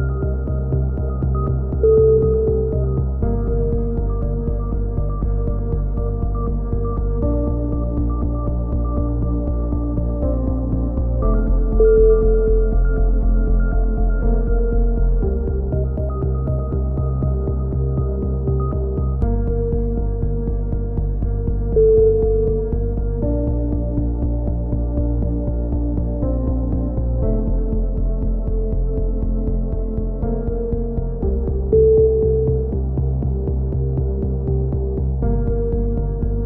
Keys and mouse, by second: 0.7 click, 0.9 ctrl+r, 1.5 a, 1.6 z, 1.8 z, 2.0 click, 2.2 z, 3.0-4.2 drag, 4.2 right click, 4.4 click, 4.8 a, 4.9 Tab, 5.3 click, 5.7 Tab, 5.8 right click, 6.0 ctrl+l, 6.1 ctrl+n, 6.4 a, 6.5 KP_3, 6.6 z, 7.7-9.5 drag, 7.7 z, 11.1 z, 11.8 click, 11.8 right click, 12.1 e, 12.4 click, 13.3 a, 13.4 z, 13.6 click, 14.6 ctrl+z, 14.9 click, 15.6 a, 16.0 click, 16.4 right click, 16.7 KP_3, 16.9 z, 17.7 e, 18.1 click, 19.0 r, 20.3 click, 21.0 click, 21.3 ctrl+z, 21.5 ctrl+z, 22.1 ctrl+z, 22.1 s, 22.7 r, 23.3-24.4 drag, 24.5 click, 24.6 a, 28.4-29.6 right drag, 29.6 f, 29.6 a, 30.0 KP_3, 31.9 ctrl+z, 32.2 ctrl+z, 32.2 a, 32.6 ctrl+r, 34.7 a, 34.9 z, 34.9 z, 35.1 click.